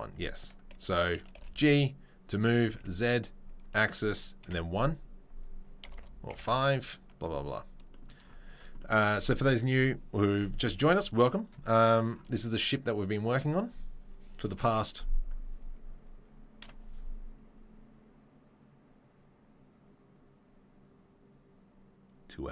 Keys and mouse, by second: 0.5-10.5 middle drag, 1.3 g, 10.5-13.9 drag, 13.9-22.5 middle drag.